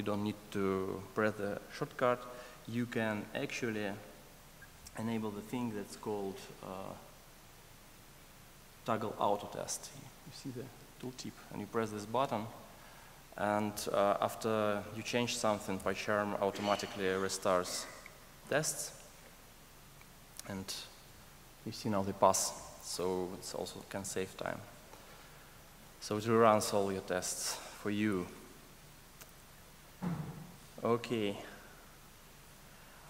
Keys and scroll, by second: 17.2 super+s.